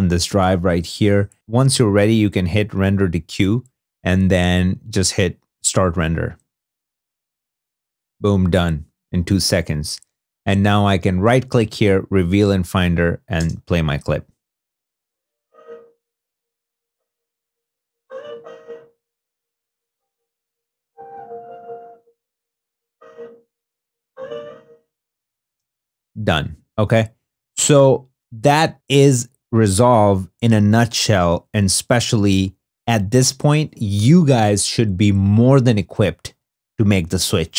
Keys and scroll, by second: 13.2 space, 25.3 space, 27.2 super+w.